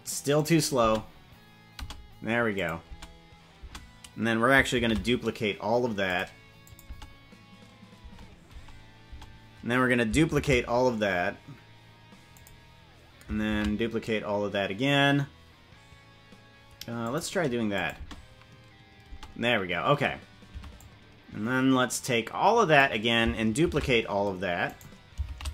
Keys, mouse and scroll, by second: 0.8 space, 1.8 space, 2.5 click, 2.9 space, 3.5 space, 4.8 shift+d, 6.6 click, 6.9 space, 8.1 space, 8.5 space, 9.1 space, 10.3 shift+d, 13.5 shift+d, 17.7 click, 17.9 space, 19.1 space, 20.5 c, 25.2 shift+d.